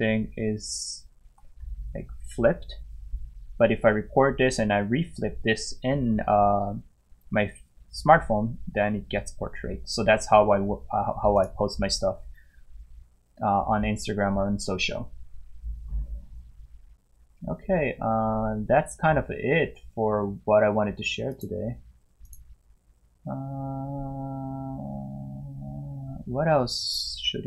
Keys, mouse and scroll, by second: 11.4 click, 21.3 click, 22.2 click.